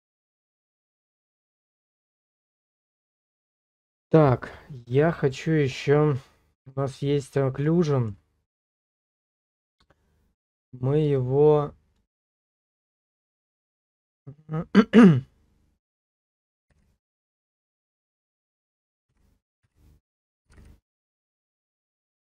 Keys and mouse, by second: 0.9-2.7 middle drag, 3.3 middle click, 5.5 middle click, 7.0 middle click, 7.9 middle click, 8.7 middle click, 10.7-12.1 drag, 12.1 click, 12.9-22.2 drag, 18.3 BackSpace.